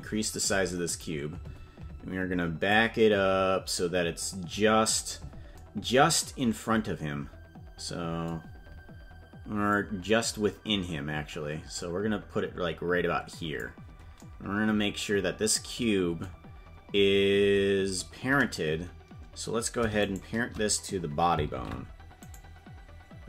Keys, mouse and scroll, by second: 3.0-5.3 drag, 10.0-14.1 drag, 20.3 shift+right click, 21.9 ctrl+p.